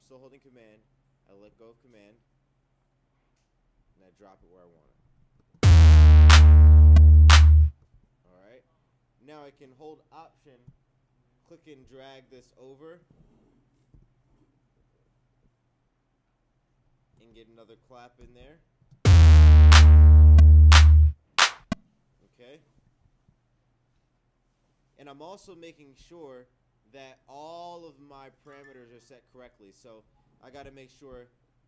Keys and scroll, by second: 13.9 Return, 18.2 Return.